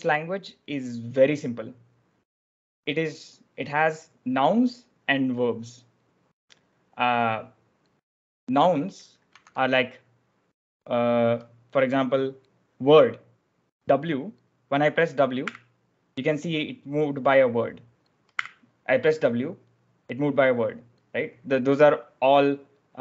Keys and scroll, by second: 9.2 k, 9.4 k, 15.4 w, 18.2 w.